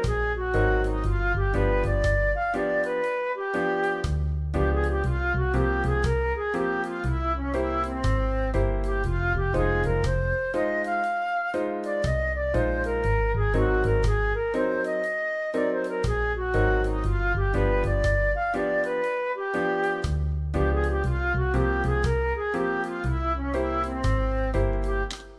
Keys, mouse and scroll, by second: 25.1 space.